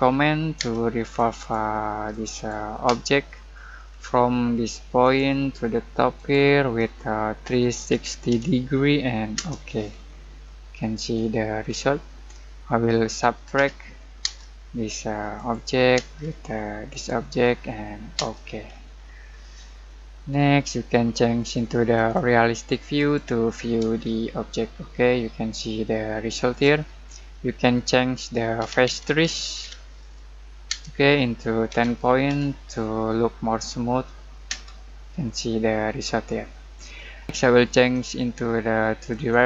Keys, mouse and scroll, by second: 0.0-0.5 typing, 1.0 click, 2.8 space, 3.3 middle click, 3.7 scroll up 1, 7.2-8.8 typing, 9.3 Return, 9.9 scroll down 1, 10.4 middle click, 11.1 scroll up 1, 13.0-14.2 typing, 15.9 space, 16.9 click, 18.1 space, 18.7 scroll down 1, 19.8-21.9 middle drag, 21.9 click, 24.0 shift+middle click, 24.3-25.2 shift+scroll up 1, 26.7 scroll up 1, 28.3-30.6 typing, 31.7-32.2 typing, 34.4 space, 37.9 click.